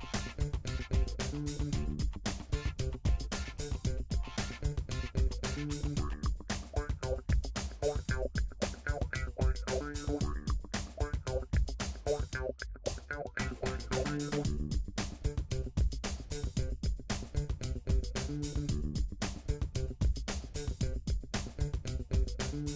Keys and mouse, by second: 1.6-3.3 shift+middle drag, 3.6 middle click, 3.8 Tab, 4.0-6.6 middle drag, 6.6 Tab, 7.3 alt+click, 8.0 KP_3, 9.3 click, 14.8 g, 19.4 e.